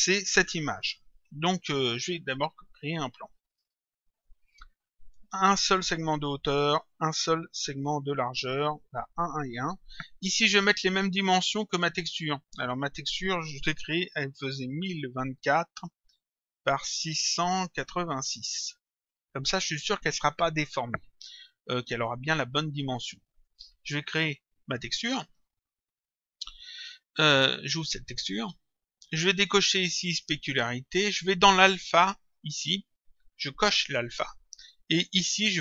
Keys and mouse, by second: 2.7 click, 5.8 click, 8.1 click, 10.4 click, 12.8 click, 13.0 click, 16.8 click, 18.8 click, 22.0 click, 24.9 click, 27.7 click, 30.1 click, 31.6 click, 33.6 click.